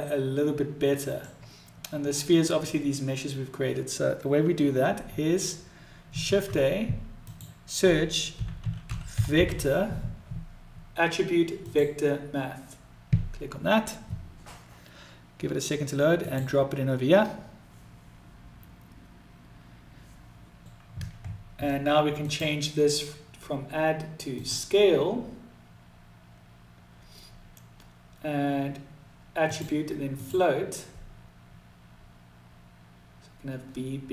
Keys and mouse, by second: 21.8-26.4 drag, 29.1-32.3 drag.